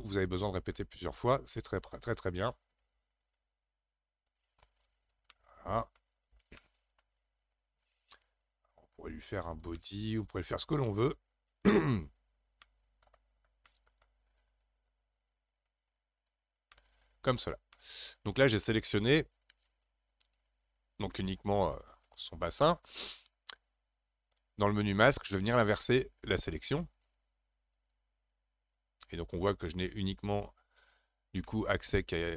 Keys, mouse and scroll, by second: 1.0-2.2 scroll up 4, 2.2-5.2 drag, 5.3 middle click, 6.2-6.6 scroll down 2, 6.6-8.4 middle drag, 8.4-9.8 drag, 9.8-11.0 middle drag, 11.0-12.4 drag, 12.4 scroll down 1, 12.6 middle click, 13.4 scroll up 1, 13.6 middle click, 14.6-16.7 drag, 16.7 middle click, 17.5 scroll down 1, 17.8-20.8 middle drag, 25.0-28.0 drag, 31.4-32.3 middle drag.